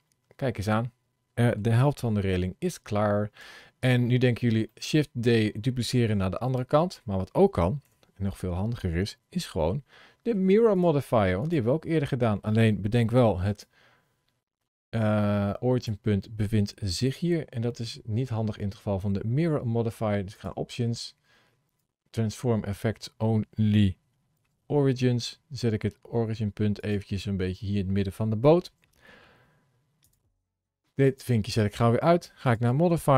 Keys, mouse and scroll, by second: 3.3 Tab, 3.9-4.3 scroll down 3, 4.5 middle click, 7.7 KP_7, 9.2 scroll up 1, 9.5 shift+middle click, 10.6 click, 11.3 click, 13.3 ctrl+shift+a, 20.2 click, 24.5 g, 29.9 click, 32.4 click.